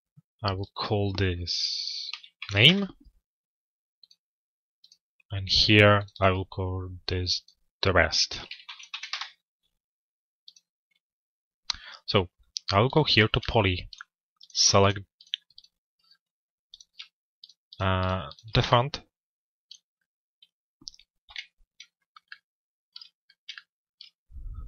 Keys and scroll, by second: 2.2 Return, 8.7 Return, 12.1 Return, 20.8 z.